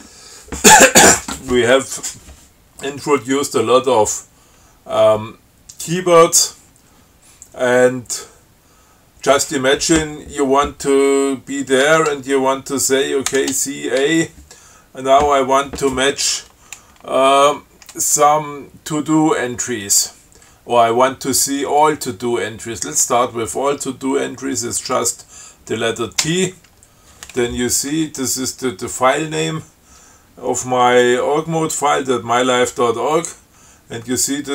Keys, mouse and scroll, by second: 13.6 ctrl+c, 14.3 a, 26.5 t.